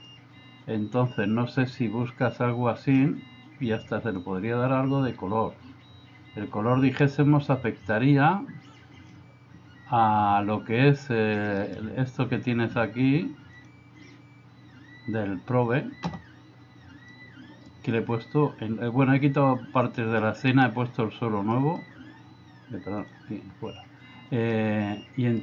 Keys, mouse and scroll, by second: 13.6 click, 17.1-17.7 middle drag, 21.6 middle click, 24.6-25.4 middle drag.